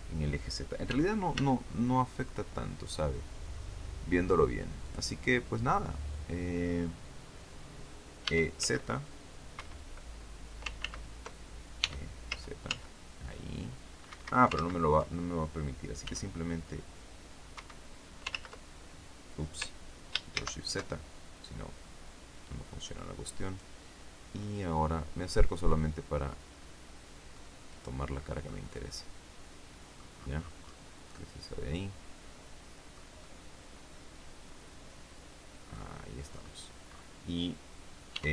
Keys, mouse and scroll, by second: 0.8 e, 1.3 s, 4.7 click, 5.2-5.6 scroll down 2, 8.1 e, 8.5 z, 9.5 Escape, 10.7 ctrl+z, 11.7 e, 12.2 z, 14.0 Escape, 14.5 ctrl+z, 15.9 s, 17.5 Escape, 18.2 ctrl+z, 20.3 ctrl+shift+z, 23.3 right click, 24.3-24.9 scroll up 2, 25.7-27.4 drag, 27.6 right click, 28.1 scroll down 2, 28.4-29.9 drag, 29.9 scroll up 2, 30.1-30.6 scroll down 2, 30.6-31.1 scroll down 1, 31.1-33.1 drag, 35.7 click, 36.2-37.1 scroll up 4, 38.1 e.